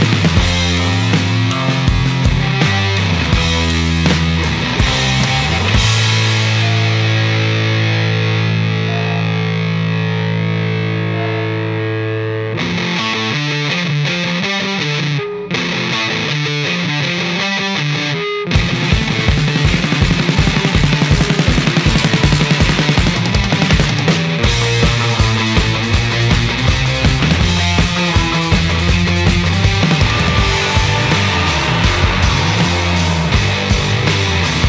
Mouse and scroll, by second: 0.7 click, 3.7 click, 5.4 click, 6.2 click, 8.0 click, 8.6 click, 9.9 right click, 14.8-18.5 right drag, 23.4 click, 25.6 click, 29.4 click, 33.1-34.2 drag.